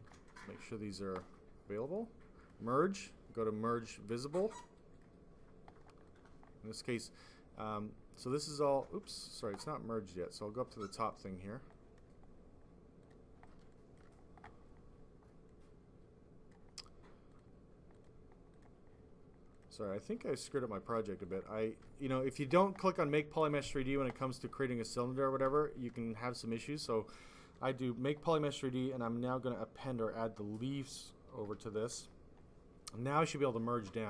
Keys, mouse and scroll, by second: 0.0 ctrl+click, 0.2 ctrl+click, 2.3 click, 2.9 click, 4.8 click, 6.0 click, 8.1 click, 10.9 click, 11.6 click, 12.9 click, 13.1 click.